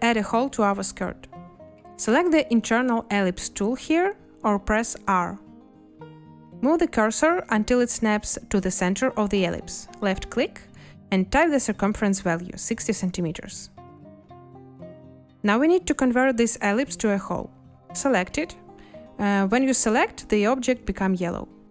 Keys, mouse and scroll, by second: 13.0 6, 13.4 0, 16.7 z.